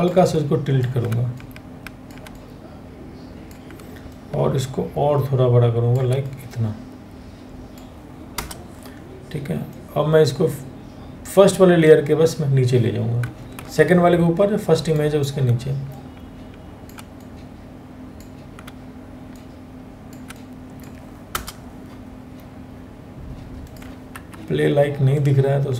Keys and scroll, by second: 7.9 Return, 13.2 ctrl+t, 20.9 Return, 23.7 ctrl+t.